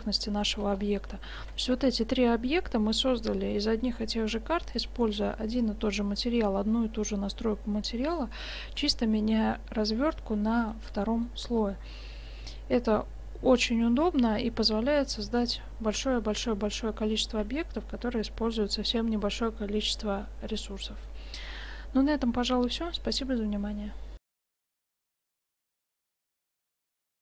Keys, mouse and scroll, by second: 1.5 shift+z, 8.1-10.6 middle drag.